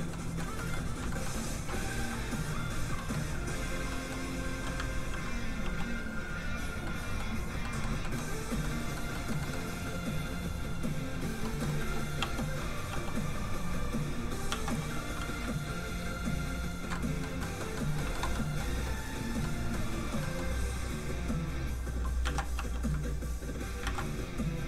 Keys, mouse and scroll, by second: 1.1 shift+middle click, 2.5 shift+click, 2.9 shift+middle click, 3.4 click, 3.4 middle click, 3.9 middle click, 4.8 ctrl+click, 5.6 click, 5.7 click, 6.8 middle click, 8.6 shift+middle click, 8.8 middle click, 8.9 middle click, 10.4 click, 11.4 middle click, 11.8 f, 11.9 click, 12.2 f, 12.5 click, 12.9 f, 13.0 click, 13.7 ctrl+click, 14.5 ctrl+z, 14.8 f, 15.4 ctrl+click, 16.9 ctrl+middle click, 18.0 middle click, 18.1 shift+middle click, 19.0 middle click, 19.0 f, 19.1 click, 19.4 middle click, 20.2 middle click, 21.3 click, 22.2 ctrl+z, 22.6 f, 22.7 click, 22.9 ctrl+click, 23.8 ctrl+z.